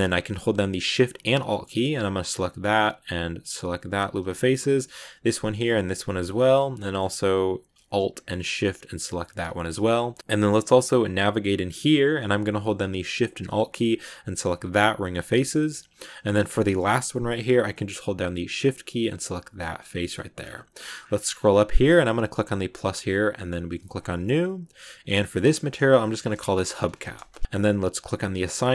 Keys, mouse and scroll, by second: 2.5 alt+shift+right click, 3.9 alt+shift+right click, 5.1 alt+shift+right click, 6.1 alt+shift+right click, 6.4-9.1 middle drag, 9.1 alt+shift+right click, 9.6 shift+middle click, 9.8 scroll down 1, 10.0-12.6 middle drag, 14.2 alt+shift+right click, 14.9 scroll down 2, 15.0-16.5 shift+middle drag, 16.5-17.0 scroll up 2, 19.3 shift+right click, 19.7 scroll down 2, 19.9 middle click, 20.3-21.0 scroll up 16, 22.1-22.6 scroll up 7, 22.6-24.9 drag, 25.0-27.4 drag, 27.4 scroll down 2.